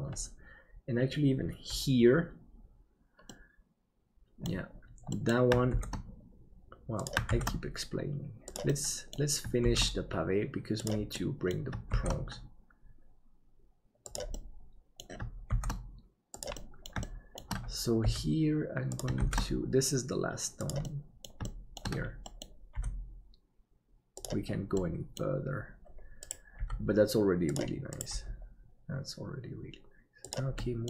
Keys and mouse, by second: 3.4-4.5 middle drag, 5.2 middle click, 5.7 shift+d, 8.8 middle click, 11.2 middle click, 14.5 middle click, 15.5 shift+d, 16.7 middle click, 17.1 shift+middle click, 18.0 g, 19.2 shift+d, 20.9 middle click, 21.6 middle click, 22.3 middle click, 22.7 g, 24.9 middle click, 26.6 g, 28.1 g, 30.5 shift+middle click.